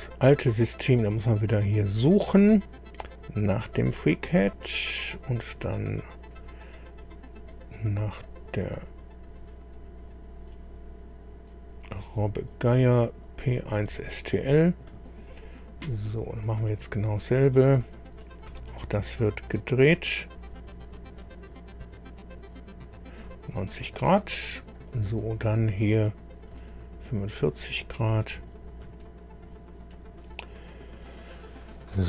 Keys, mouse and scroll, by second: 0.0-0.3 scroll down 1, 1.1 scroll up 1, 3.0 scroll up 2, 4.2 click, 5.0-6.3 scroll down 3, 6.5-6.8 scroll down 1, 7.0 scroll down 2, 8.5-8.9 scroll down 2, 9.4-9.7 scroll down 2, 10.0-10.3 scroll down 2, 10.5 scroll up 2, 11.8 click, 13.2 click, 14.9 click, 16.5 click, 17.6 scroll down 2, 18.2 middle click, 18.5-19.7 right drag, 20.4-23.4 drag, 24.9 right click, 26.5-29.0 drag.